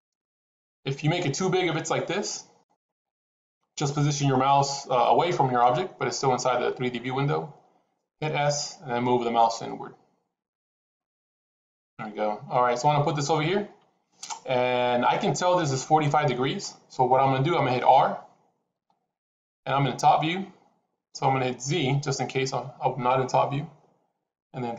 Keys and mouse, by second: 0.5 s, 8.2 s, 18.7 r.